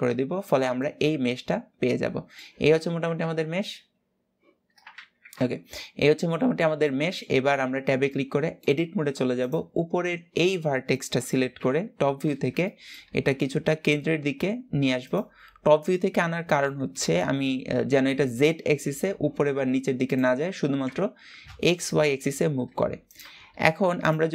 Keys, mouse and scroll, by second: 0.2-0.5 scroll down 3, 0.5-2.3 middle drag, 2.3 scroll up 2, 2.9 ctrl+z, 4.7 ctrl+shift+z, 5.4-7.2 middle drag, 7.2 Tab, 7.8-9.0 middle drag, 9.0 click, 11.3 KP_7, 12.4 shift+middle click, 13.0 g, 15.3-17.2 middle drag, 17.2 alt+z, 17.9 g, 20.6 KP_7, 21.9-22.4 scroll up 1, 22.4 g.